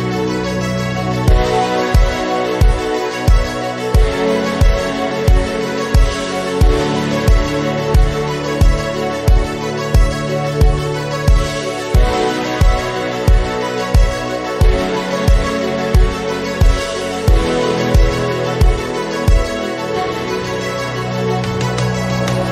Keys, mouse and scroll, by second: 0.2-1.5 drag, 2.0-3.3 drag, 3.9-6.3 drag, 8.5-11.2 drag, 11.9-13.1 drag, 14.1-15.3 drag, 16.8-22.5 drag.